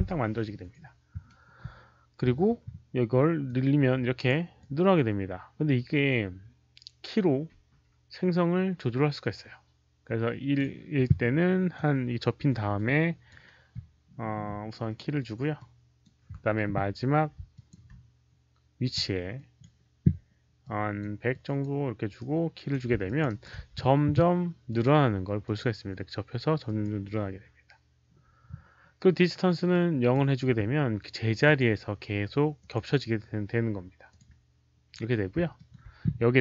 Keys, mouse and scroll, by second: 3.4 click, 4.5-10.5 drag, 7.7 Return, 7.7 KP_1, 11.6-13.2 drag, 14.9 right click, 15.5 click, 16.8 click, 16.8 right click, 16.8 q, 17.4 alt+click, 17.6 alt+q, 17.6 right click, 19.2 right click, 19.2 q, 19.3 alt+click, 20.5 alt+click, 21.2 click, 21.5 right click, 21.5 q, 22.1 right click, 23.0 alt+click, 23.2 alt+right click, 23.4 q, 24.6 alt+right click, 24.6 q, 24.6 alt+click, 25.3 alt+click, 25.3 q, 26.6 alt+click, 29.6 alt+click, 29.6 alt+right click, 29.6 q, 31.3 alt+click, 32.5 alt+click, 32.5 alt+right click, 32.5 q, 32.6 alt+right click, 32.6 q, 34.0 click, 34.1 q, 35.4 click, 35.5 alt+middle click.